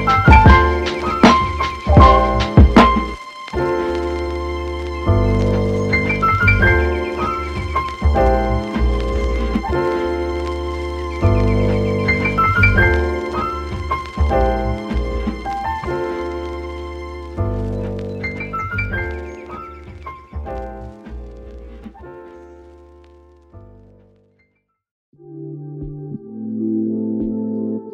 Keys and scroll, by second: 6.1 super+z, 6.4 super+z, 7.0 super+z, 15.2 super+z.